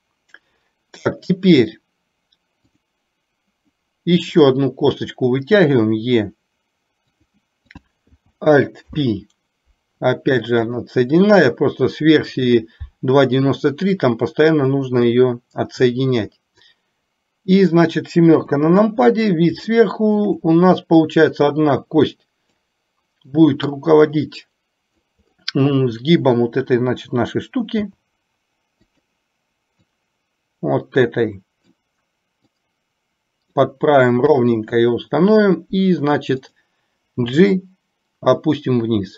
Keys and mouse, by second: 5.7 e, 7.8 click, 8.9 alt+p, 11.2 click, 11.6 click, 12.5 click, 13.8 click, 14.5-15.9 drag, 16.7-17.9 drag, 18.5 KP_7, 19.9 middle click, 21.2-22.7 drag, 23.5-25.1 drag, 27.9 s, 30.1-31.8 drag, 32.6-33.7 drag, 34.5 KP_3, 36.6 click, 37.3 g.